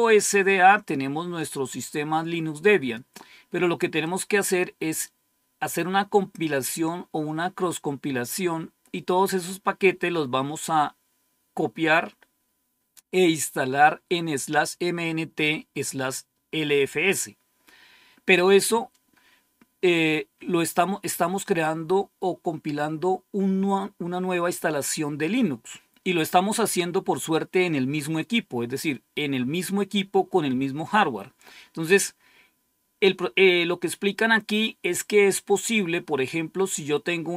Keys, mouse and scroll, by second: 1.3-3.0 drag, 3.9 click, 34.0-34.5 scroll down 1, 34.5-35.3 scroll up 1.